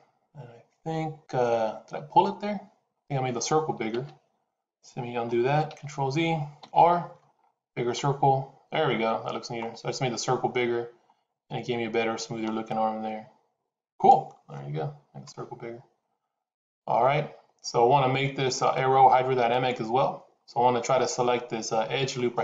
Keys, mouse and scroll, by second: 5.6 ctrl+z, 6.5 r.